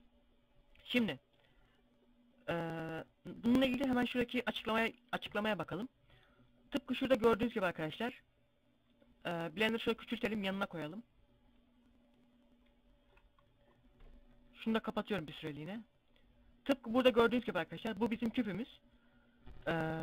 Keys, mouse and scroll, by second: 0.9 scroll up 1, 1.7 scroll down 1.